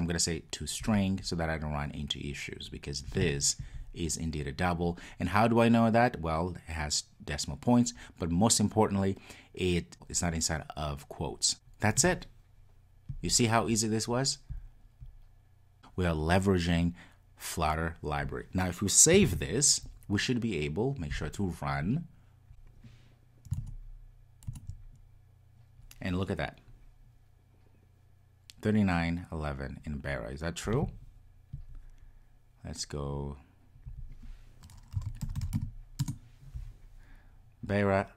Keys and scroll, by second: 19.3 super+s, 21.3 ctrl+r.